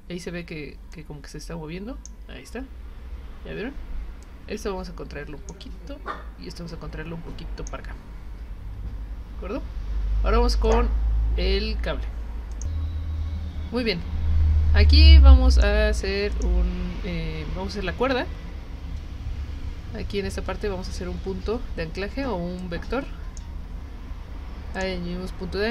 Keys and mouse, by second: 0.9-2.1 drag, 4.2-5.5 drag, 6.7 click, 10.6 click, 12.5 click, 15.5 click, 16.3 click, 22.6 click, 24.7 click.